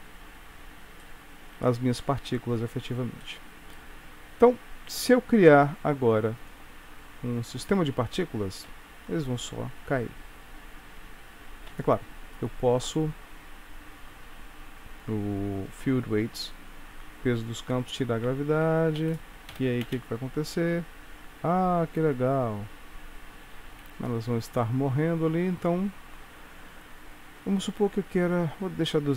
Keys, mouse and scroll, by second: 2.8 shift+middle click, 2.8 click, 2.8-5.3 scroll up 2, 5.3 middle click, 7.3 click, 7.7 click, 8.9 space, 12.8-14.7 scroll down 8, 15.7 click, 17.5 click, 18.5 space, 19.1 Escape, 19.6 shift+Left, 19.9 space, 23.8 Escape, 25.4-26.1 scroll up 10.